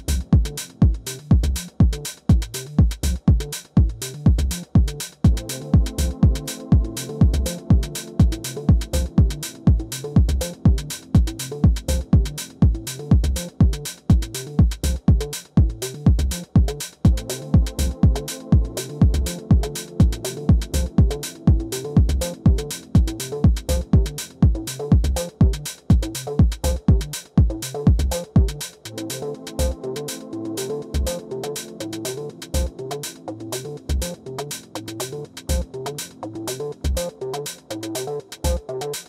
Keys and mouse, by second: 0.0-1.2 drag, 2.4 click, 3.4 alt+drag, 4.0 alt+drag, 4.6 alt+click, 5.9 click, 6.9 ctrl+d, 8.5 e, 9.3-10.4 drag, 11.7 click, 12.8-14.3 drag, 14.5-15.0 alt+middle drag, 16.2 e, 16.8-20.9 drag, 21.9-23.0 alt+drag, 23.9-26.4 drag, 27.5 click, 27.9 click, 28.6-29.8 drag, 29.7 KP_0, 31.6 alt+middle click, 33.5 ctrl+d, 34.8 e, 35.5-37.8 drag.